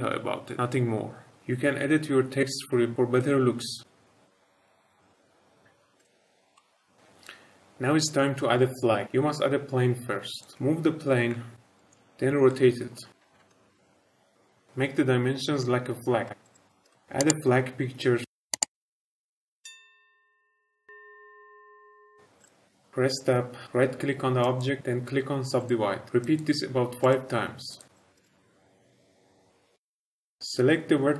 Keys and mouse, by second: 5.9 click, 6.5-6.9 middle drag, 9.1 shift+a, 10.5 g, 11.3 x, 11.8 shift+middle click, 12.4-12.8 shift+middle drag, 13.1-13.7 typing, 13.4 Return, 13.8 click, 13.8 shift+middle click, 13.9 shift+middle click, 16.1 s, 16.3 x, 16.6 s, 16.6 middle click, 16.8 click, 16.8 s, 16.8 shift+middle drag, 16.9 middle click, 18.2 click, 18.5 click, 19.5 click, 21.8 click, 22.9 ctrl+z, 22.9 Tab, 24.4 right click, 26.2 right click, 27.6 right click, 28.1 right click, 30.1 click.